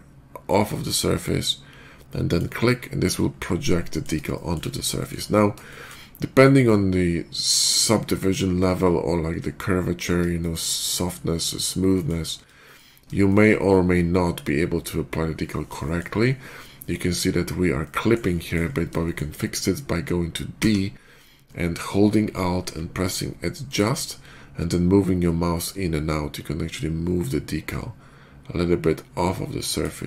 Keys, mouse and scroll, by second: 2.1 click, 3.2-3.9 middle drag, 4.2 shift+middle drag, 4.8 shift+middle click, 5.1-5.8 shift+middle drag, 8.7 middle click, 9.0 middle click, 10.2 shift+middle click, 11.8 shift+middle click, 12.5 shift+middle click, 13.1 shift+middle click, 15.7 shift+middle click, 17.7 shift+middle click, 18.2 shift+middle click, 18.9 shift+middle click, 20.4 d, 23.5 alt+click, 29.5 alt+click.